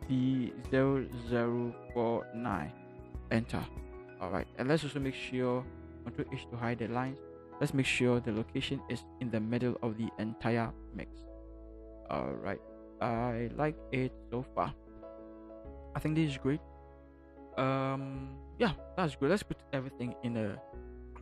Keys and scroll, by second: 0.7 0, 0.9 0, 1.6 4, 2.1 9, 3.0 Return, 5.3 v, 6.0 ctrl+v, 6.2 ctrl+h, 8.5 Down, 11.0 Left.